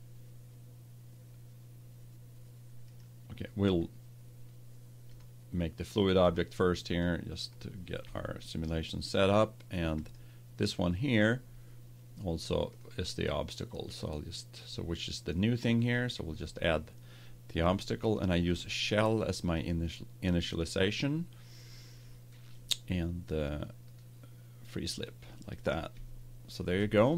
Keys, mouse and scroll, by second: 2.8-4.7 right drag, 5.0-7.9 drag, 9.9-11.9 right drag, 12.6-15.6 drag, 18.4-20.3 drag, 23.8-25.7 drag, 25.9-27.1 middle drag.